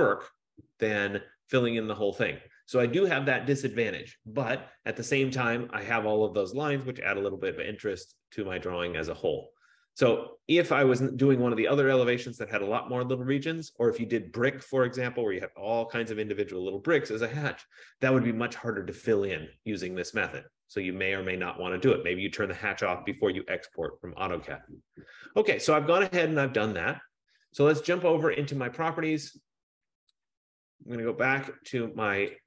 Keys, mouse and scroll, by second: 1.1 click, 28.8-32.4 drag.